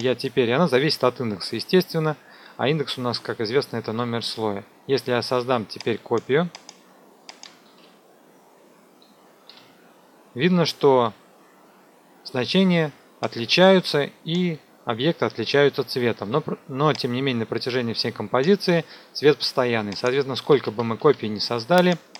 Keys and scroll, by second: 7.6 ctrl+d, 9.4 u, 20.3 ctrl+d.